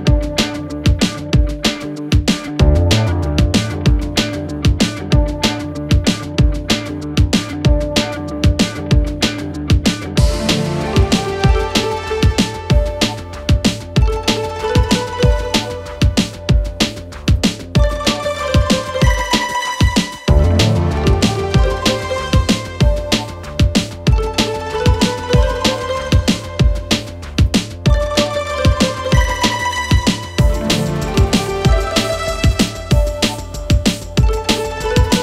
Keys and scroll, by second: 1.6 2, 2.8 Escape, 3.4 Escape, 5.7 shift+f, 12.8 Delete.